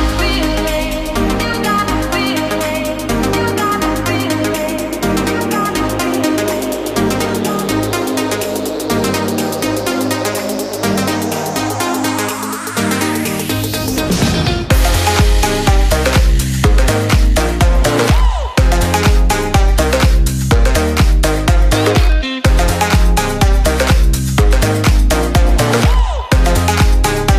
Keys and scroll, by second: 1.2 ctrl+space, 9.5 ctrl+y, 10.7 ctrl+space, 11.8 ctrl+alt+3, 12.3 ctrl+alt+2, 13.9 space, 17.2 ctrl+space.